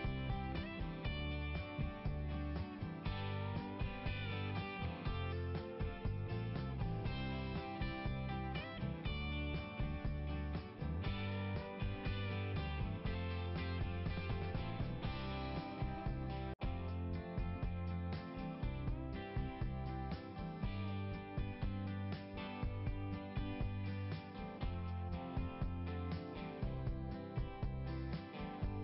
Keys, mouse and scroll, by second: 0.6 click, 1.4 click, 3.4 click, 3.5 click, 6.6-7.0 scroll up 2, 16.0 scroll up 1, 23.5 scroll down 1.